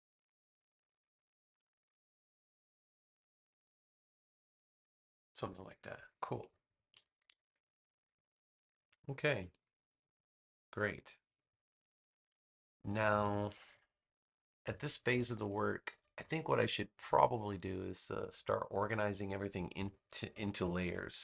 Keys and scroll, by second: 6.9 super+-, 8.5 space, 9.5 super+s, 21.0 super+=.